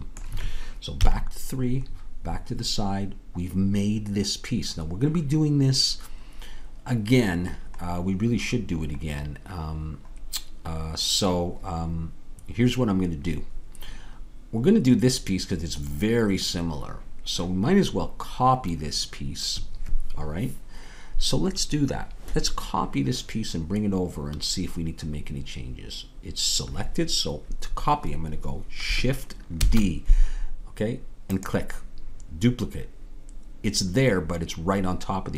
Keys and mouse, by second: 1.0 KP_3, 4.9-12.6 middle drag, 29.6 shift+d.